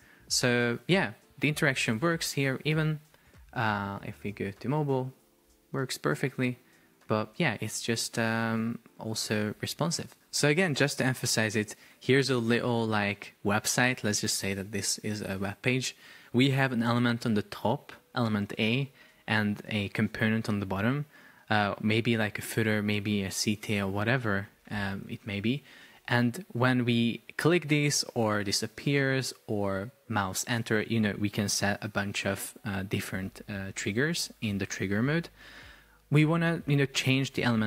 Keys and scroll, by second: 2.8 super+p.